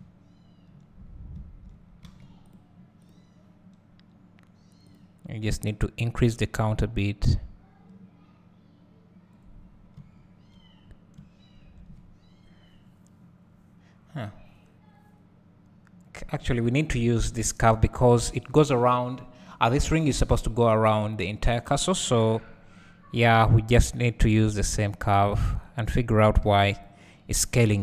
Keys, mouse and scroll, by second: 2.2 alt+a, 2.5 click, 6.3-24.4 drag, 9.9 `, 10.8-11.2 scroll down 2, 11.2 `, 22.0-24.4 scroll up 2, 25.3 click, 25.8 click, 27.5 scroll down 1.